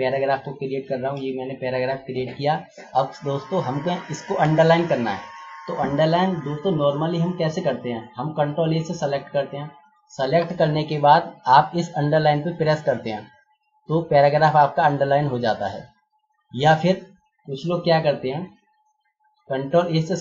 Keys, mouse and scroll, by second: 0.0-0.5 typing, 1.1 Return, 8.6 ctrl+a, 13.5 click, 20.0 click.